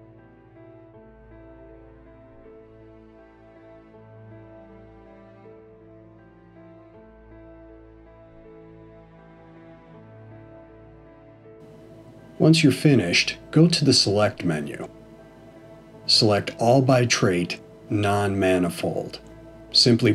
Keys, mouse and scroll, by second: 0.4 shift+click, 1.4 f, 2.1 click, 2.9 shift+click, 3.7 f, 4.2 middle click, 7.3 click, 7.9 shift+click, 8.9 f, 9.7 middle click, 14.7 click, 15.7 click.